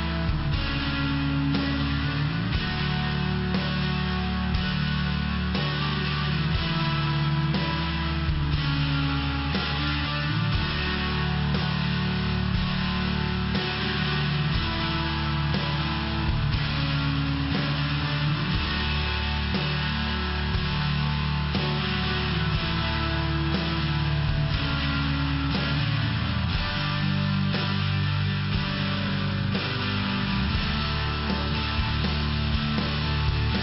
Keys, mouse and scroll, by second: 7.1 click, 9.5 click, 9.6 click, 10.7 click, 11.8 click, 11.9 click, 13.4 click, 13.4 click, 15.2 click, 15.4 click, 15.7 click, 15.9 click, 16.4 click, 16.5 click, 16.8 click, 16.9 click, 17.7 click, 17.8 click, 18.6 click, 18.7 click, 19.6 click, 21.0 click, 21.1 click, 21.5 click, 21.6 click, 21.9 click, 22.1 click, 22.8 click, 23.9 click, 24.0 click, 24.4 click, 24.5 click, 25.3 click, 25.4 click, 25.8 click, 25.9 click, 26.5 click, 26.6 click, 27.1 click, 27.6 click, 28.1 click, 28.6 click, 29.2 click, 29.3 click, 30.4 click, 30.5 click, 31.0 click, 31.1 click, 31.8 click.